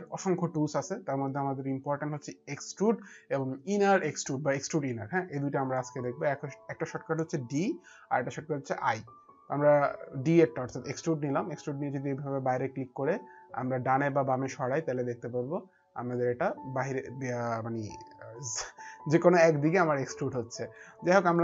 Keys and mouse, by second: 10.6 click, 11.6 click, 21.1 middle click.